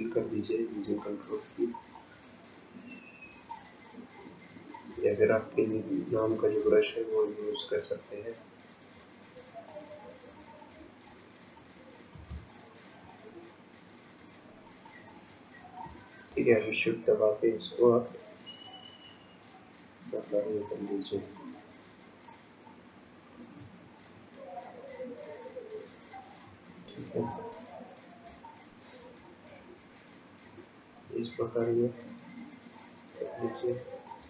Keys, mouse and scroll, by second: 1.0 ctrl+click, 2.0 ctrl+click, 9.7 ctrl+click, 11.1 click, 12.0 ctrl+click, 12.6 ctrl+click, 14.9 ctrl+click, 16.5 shift+click, 17.1 shift+click, 21.4 shift+click, 23.8-24.8 scroll down 10, 26.7-28.4 scroll up 9, 28.5 shift+click.